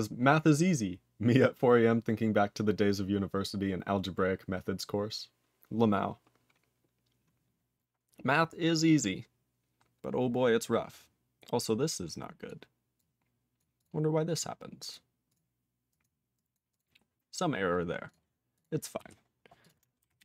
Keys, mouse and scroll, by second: 19.0 q, 19.6 click.